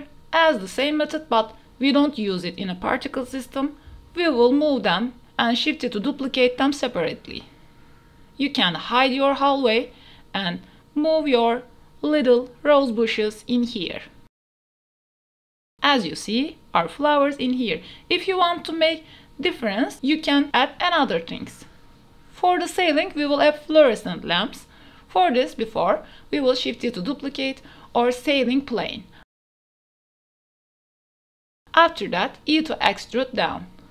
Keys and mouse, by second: 0.8-1.5 drag, 2.2-2.6 drag, 3.3 ctrl+s, 4.0-5.0 drag, 5.8-7.8 drag, 8.0 ctrl+a, 8.6 shift+click, 9.0 s, 9.7 h, 10.1 click, 10.5 KP_7, 11.0 shift+drag, 11.4 g, 12.4 shift+click, 12.6-15.2 typing, 13.2 click, 13.6 alt+h, 14.5 click, 14.9 click, 15.6 click, 16.1 click, 16.4 ctrl+s, 18.0 g, 18.4 y, 21.8 Tab, 22.4 shift+click, 22.5 3, 22.8 shift+d, 23.2 z, 24.5 shift+click, 25.0 s, 27.5-27.9 drag, 28.4 shift+middle click, 29.2 middle click, 29.4-31.1 typing, 29.5 click, 33.1 click.